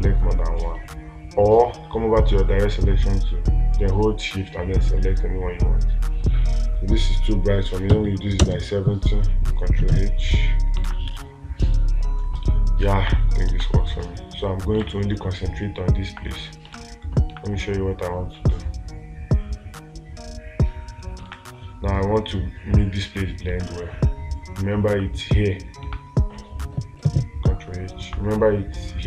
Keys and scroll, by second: 14.1 space, 17.2 space, 21.7 space.